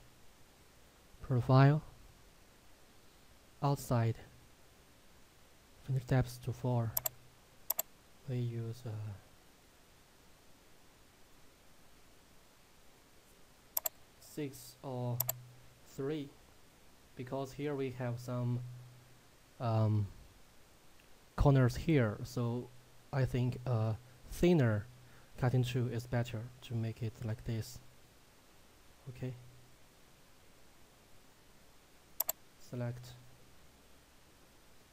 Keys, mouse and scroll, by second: 7.1 click, 13.9 click, 32.2 click.